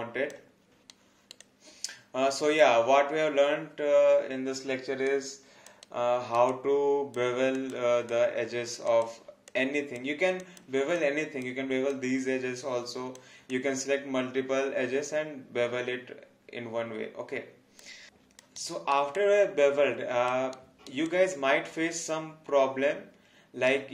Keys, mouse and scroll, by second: 0.9 alt+right click, 1.4 alt+click, 5.1 alt+click, 5.8 alt+right click, 6.8 alt+click, 8.1 alt+click, 10.9 alt+click, 11.9 alt+click, 18.6 alt+right click, 19.1 alt+click, 20.5 alt+right click, 21.1 alt+click.